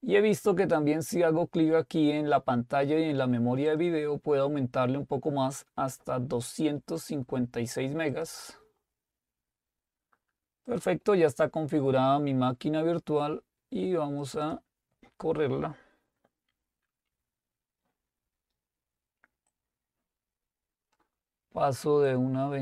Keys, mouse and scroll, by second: 3.7 click, 7.0-9.7 drag, 11.1 click, 14.2-15.3 drag, 19.5-22.6 drag.